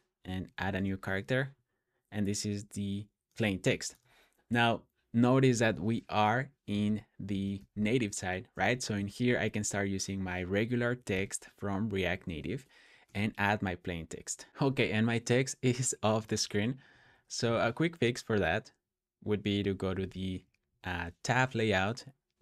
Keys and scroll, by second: 0.5 shift+1, 6.6-7.4 typing, 8.6 shift+t, 10.4-11.1 typing, 12.9 super+s, 14.5 typing, 16.7 super+p, 19.3-20.5 typing.